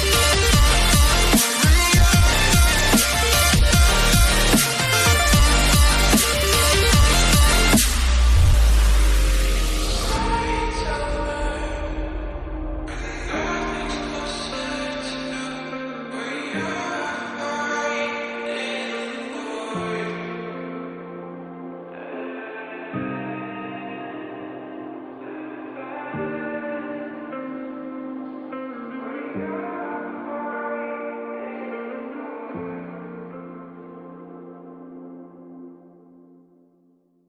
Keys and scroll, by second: 9.0 ctrl+j, 35.6 ctrl+j.